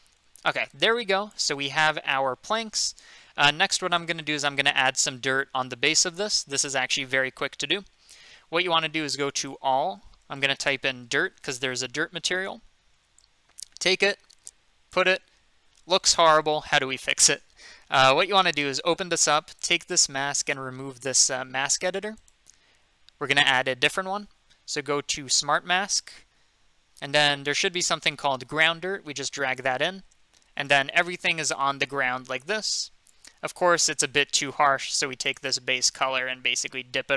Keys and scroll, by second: 10.8-12.2 typing.